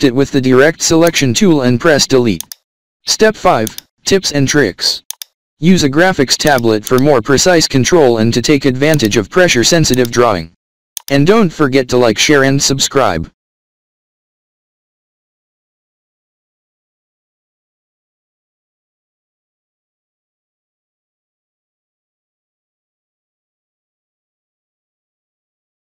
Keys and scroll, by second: 0.2 -, 4.7 alt+scroll down 1, 5.6 v, 6.1 alt+scroll down 4, 6.8 space, 7.2 space, 8.5 alt+scroll up 2, 9.4 space.